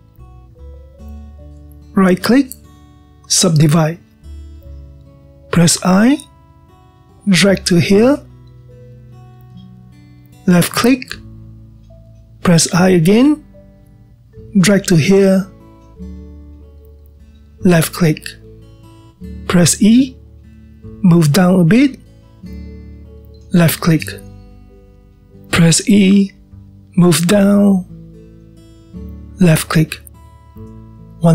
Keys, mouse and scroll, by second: 1.4-2.5 scroll up 1, 2.5 scroll up 1, 2.7-3.5 middle drag, 3.5-5.5 right drag, 5.5-7.8 middle drag, 11.7-13.2 scroll up 2, 13.2-13.6 scroll up 1, 19.3-20.7 middle drag, 20.7-21.9 scroll up 1, 21.9 e, 24.5-27.0 middle drag, 27.0 e, 31.2-31.3 middle drag.